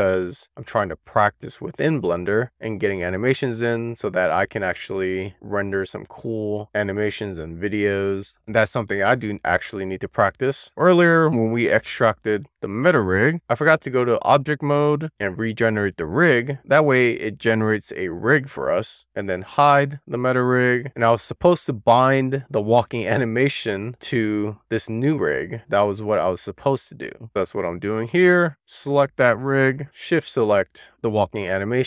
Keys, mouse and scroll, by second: 6.2 click, 10.6 click, 11.5 click, 13.2-14.9 scroll down 2, 14.9 click, 19.8 click, 22.5 click, 27.2 click, 29.5 drag, 30.7 shift+click.